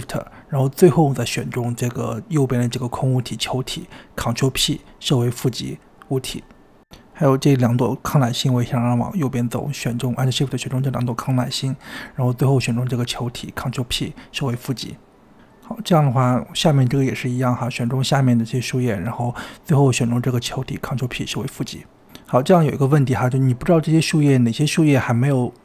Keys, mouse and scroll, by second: 0.1 shift+click, 3.2-3.5 scroll down 1, 3.5-4.4 shift+middle drag, 4.4 shift+click, 5.2 ctrl+p, 6.8 click, 8.1-8.8 scroll up 1, 8.8 click, 9.3 shift+click, 11.9 shift+click, 13.2 ctrl+p, 15.1 click, 16.1 click, 17.0 shift+click, 17.5 shift+click, 17.9 shift+click, 18.2 shift+click, 18.8 shift+click, 20.6 shift+click, 21.1 ctrl+p, 23.3 click, 24.0-25.2 scroll down 10.